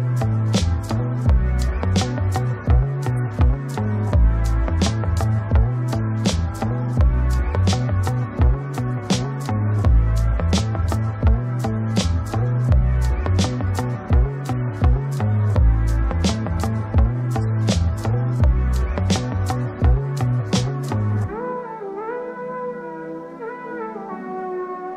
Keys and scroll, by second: 8.8 ctrl+space, 17.4 ctrl+space.